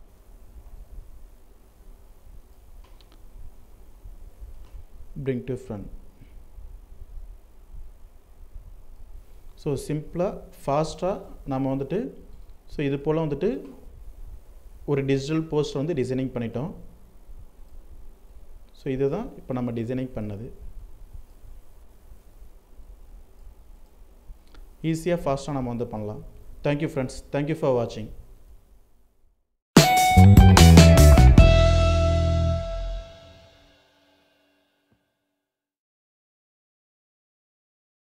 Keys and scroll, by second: 8.6 alt+space, 20.9 ctrl+r.